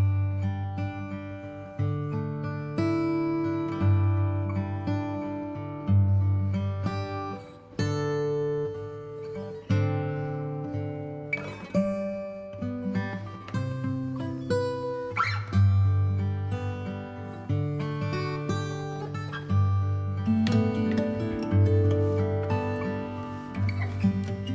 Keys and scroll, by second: 14.0 space.